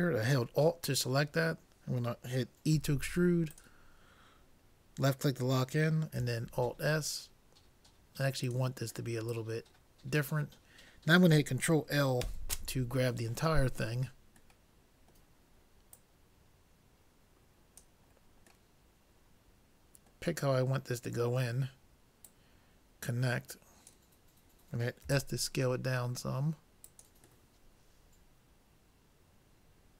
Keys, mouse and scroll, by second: 2.7 e, 6.5 alt+s, 9.3-11.1 drag, 12.3 ctrl+l, 13.9 middle click, 15.9-17.8 drag, 18.2-20.6 middle drag, 22.3-23.9 drag, 25.0 s, 27.6-29.6 middle drag.